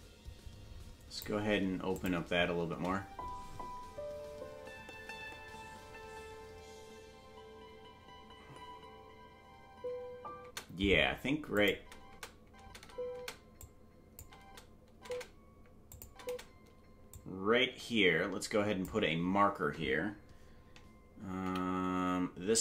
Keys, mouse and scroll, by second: 1.9 click, 2.6 space, 10.4 space, 11.5 click, 11.7 space, 13.6-15.5 drag, 13.6 space, 14.2 space, 15.5 space, 15.9 click, 16.0 space, 17.1-18.8 drag, 17.1 space, 21.4 m.